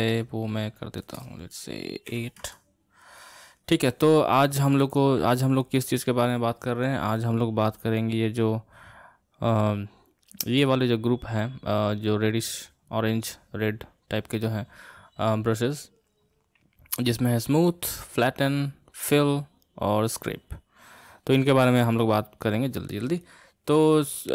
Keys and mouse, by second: 0.2-3.4 drag, 5.3-8.0 middle drag, 8.0-11.0 drag.